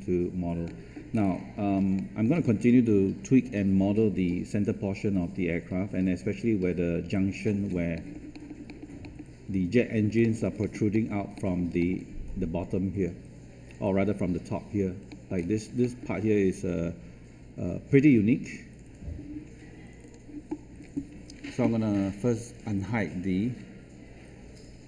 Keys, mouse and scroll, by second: 1.1-1.5 scroll up 1, 1.9 middle click, 2.2 scroll down 1, 7.9 middle click, 9.4-10.1 scroll up 1, 10.1 middle click, 15.3 scroll up 1, 15.7 middle click, 20.0 click, 20.7-21.1 scroll down 1, 21.1-21.7 scroll up 1, 22.4-23.4 drag.